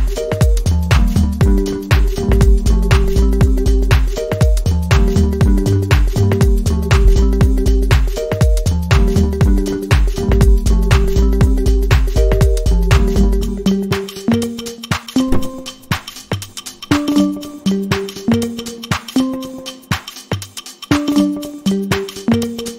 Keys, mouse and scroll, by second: 7.3-8.2 alt+scroll down 2, 11.2-11.7 alt+scroll up 1, 15.4 double click, 16.7-17.7 typing, 18.6 Return, 21.1 click, 22.1 click.